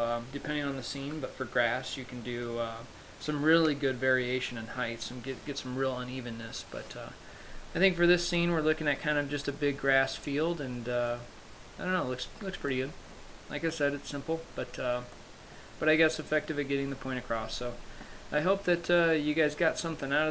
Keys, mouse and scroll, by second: 8.4-9.5 scroll up 1.